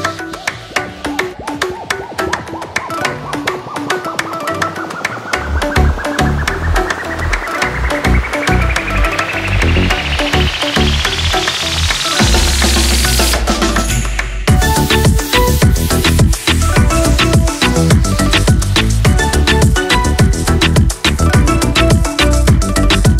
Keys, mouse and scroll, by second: 0.0 ctrl+shift+a, 1.2 Escape, 3.7 Escape, 4.0 ctrl+m, 6.3-20.6 drag.